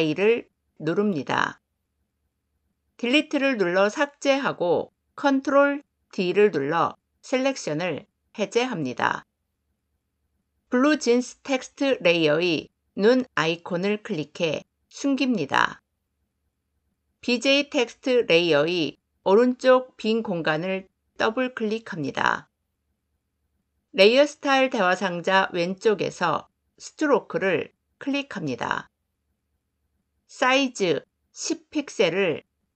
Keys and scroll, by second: 2.9 Delete, 5.2 ctrl+d.